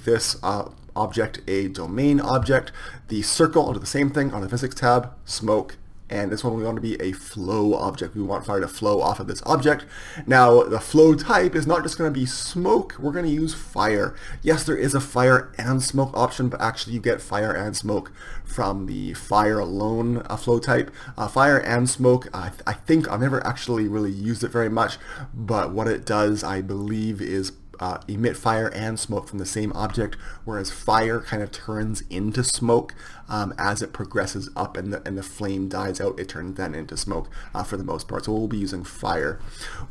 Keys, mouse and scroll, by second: 4.1-39.9 drag.